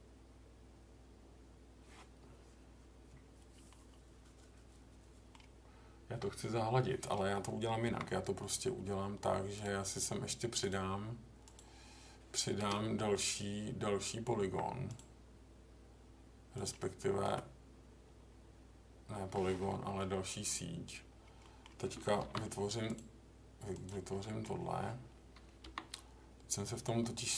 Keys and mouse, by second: 3.7-5.3 middle drag, 7.8 k, 14.4 k, 19.7 middle click, 21.4 middle click, 22.2 ctrl+r, 23.7 click, 24.2 middle click, 25.6 k.